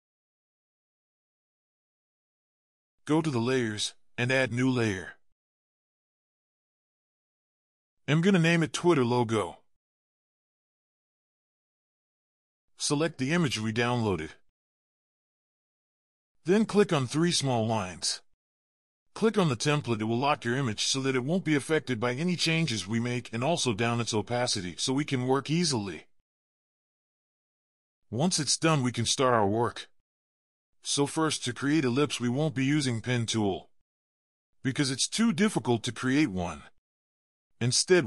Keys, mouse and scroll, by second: 0.0-0.7 scroll down 1, 8.0 double click, 10.5-11.3 typing, 11.4 Return.